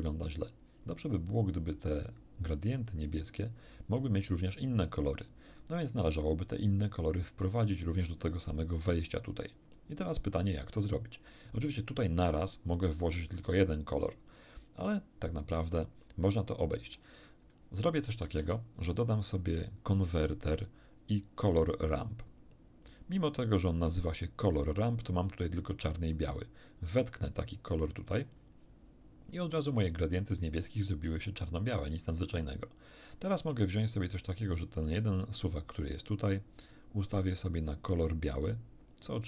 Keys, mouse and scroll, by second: 1.0 scroll down 2, 9.7 click, 17.5 click, 21.3 click, 22.9 click, 27.1-28.3 drag, 34.9 click, 35.3-36.9 drag, 37.2 click, 38.3 click.